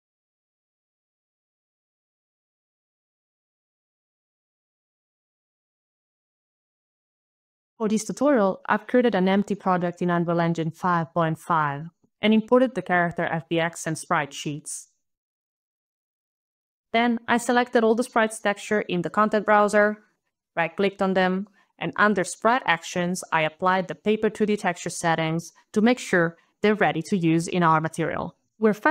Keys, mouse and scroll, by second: 0.6 Right, 1.5 Right, 1.8 scroll down 5, 2.1 click, 2.9 click, 3.3 scroll, 3.3 click, 4.2 Right, 5.0 Right, 5.9 Right, 8.6 click, 11.5 click, 12.8 click, 13.0 click, 13.5 click, 13.7 click, 15.2 click, 15.2 KP_9, 15.2 KP_0, 15.3 click, 15.7 click, 15.7 Return, 15.7 shift+click, 15.7 y, 15.8 click, 15.9 click, 16.0 click, 16.2 click, 16.3 click, 16.3 shift+click, 16.5 click, 17.3 click, 18.5 shift+click, 18.6 shift+click, 19.6 click, 26.5 click.